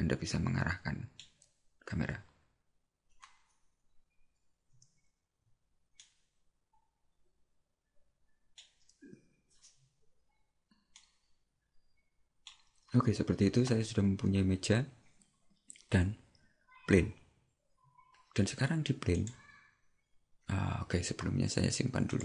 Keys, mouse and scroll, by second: 2.3-2.7 scroll up 1, 6.1 shift+middle click, 11.0 shift+middle click, 19.3 right click, 22.1 click.